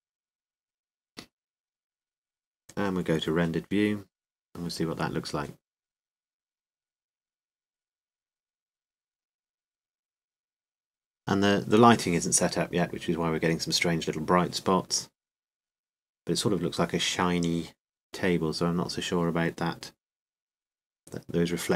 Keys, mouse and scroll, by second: 0.0-1.6 drag, 1.6 middle click, 4.4-7.0 drag, 7.9-10.9 drag, 14.5 middle click, 14.7 middle click, 15.9-17.0 middle drag.